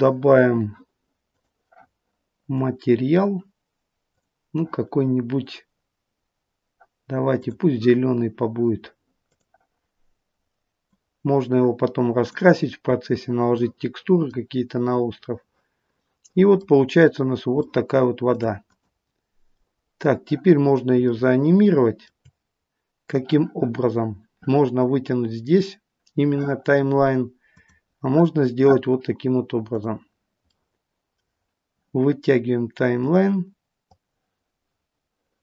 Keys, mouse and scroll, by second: 27.5 click, 30.0 click, 33.8 click.